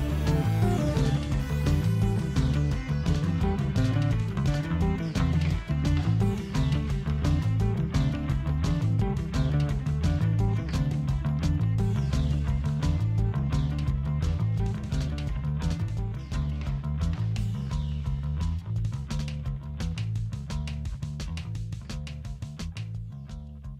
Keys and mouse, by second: 17.7-21.2 ctrl+middle drag, 23.5 click.